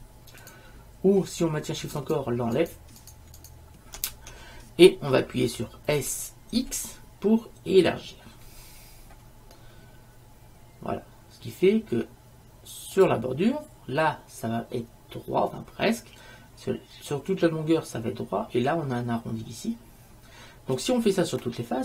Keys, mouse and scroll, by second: 6.1 s.